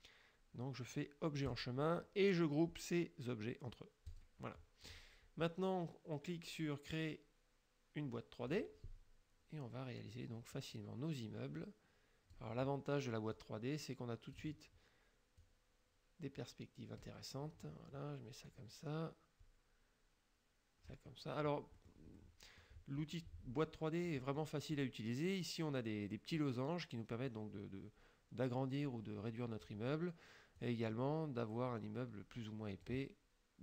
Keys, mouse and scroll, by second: 1.6 click, 4.1 click, 8.6 click, 10.6-12.6 drag, 13.4-14.6 drag, 15.5-17.3 drag, 18.5-21.1 drag, 21.8 click, 22.2 click, 24.1 click, 27.3-29.9 drag, 30.6-33.1 drag.